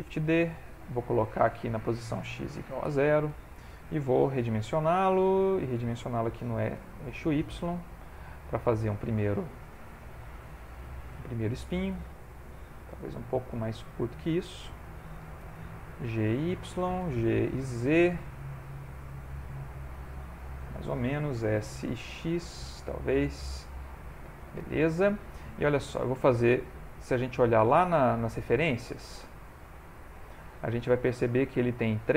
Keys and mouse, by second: 0.0 shift+d, 1.5 click, 4.9 s, 6.6 s, 8.4 middle click, 10.8 ctrl+middle click, 11.4 shift+middle click, 11.8 ctrl+middle click, 12.4 s, 16.4 g, 17.0 g, 19.5 middle click, 21.4 s, 23.1 middle click, 25.6 ctrl+middle click, 26.6 middle click, 27.2 ctrl+middle click, 28.6 middle click, 29.6 click, 30.1 ctrl+middle click, 30.6 shift+middle click, 31.2 ctrl+middle click.